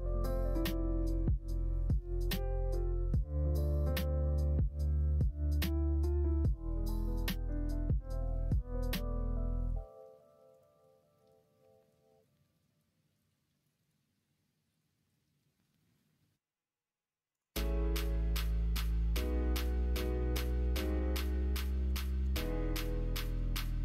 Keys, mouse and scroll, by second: 0.9 q, 7.6 ctrl+z, 8.2 middle click, 9.5 click, 10.4 click, 11.0 middle click, 11.5 q, 17.3 click, 19.1-23.8 drag, 22.3 KP_0, 22.4 KP_0.